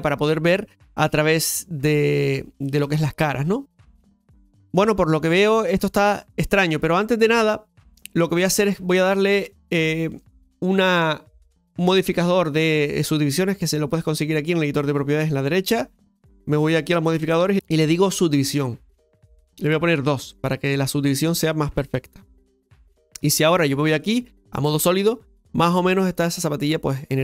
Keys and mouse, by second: 0.9 shift+middle click, 4.6 right click, 11.9 click, 22.4 Tab, 23.8 click.